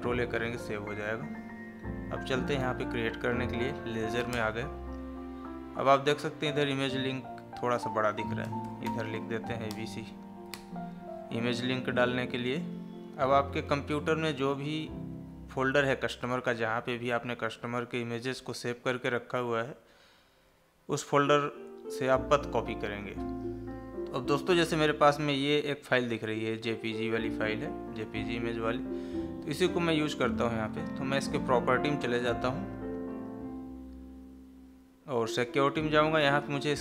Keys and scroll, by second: 0.7 Escape, 3.8 Down.